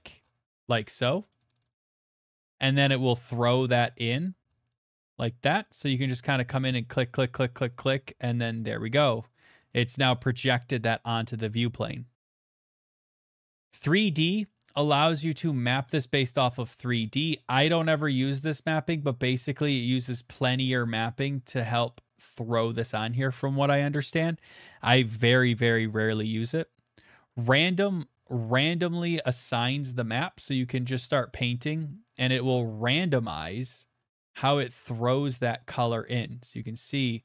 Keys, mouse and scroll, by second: 1.3 click, 1.5 click, 1.7 click, 1.7 click, 1.8 click, 1.9 click, 2.0 click, 2.1 click, 2.4-2.9 scroll, 4.7 middle click, 4.8 middle click, 4.9 middle click, 5.6 click, 5.6 middle click, 5.8 click, 6.0 click, 6.1 click, 6.3 click, 6.5 click, 6.7 click, 6.8 click, 7.2 click, 7.3 click, 7.5 click, 8.0 click, 8.0-8.5 scroll, 9.0-9.6 scroll, 9.6-10.1 scroll, 11.6-12.3 scroll, 13.0 click, 13.2 click, 13.8 click, 14.8-16.2 scroll, 16.5 click, 16.5 middle click, 16.9 click, 17.3 middle click, 17.4 middle click, 17.4 middle click, 17.5 middle click, 17.5 middle click, 18.0 middle click, 18.5 middle click, 21.0 click, 21.9 middle click, 22.8 middle click, 23.4 middle click, 23.6 ctrl+z, 26.0 click, 27.0 click, 27.4 middle click, 27.4 middle click, 27.4 middle click, 27.9 middle click, 28.1 middle click, 28.4 middle click, 28.5 middle click, 29.2 middle click, 29.5 middle click, 29.7 middle click, 31.9 middle click, 31.9 click, 32.5 click, 33.5 click, 34.0 click, 34.0 middle click, 34.1 middle click, 34.5 shift+middle click, 35.0 middle click, 35.4 middle click, 35.5 middle click, 35.6 middle click, 36.3 click, 36.7 click.